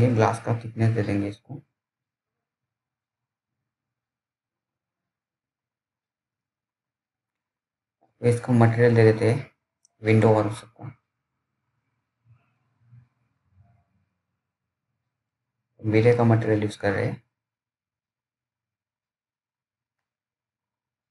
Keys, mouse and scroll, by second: 0.9-2.2 scroll down 1, 2.2-2.6 scroll up 1, 2.6 middle click, 2.6 middle click, 3.6 click, 19.8 click.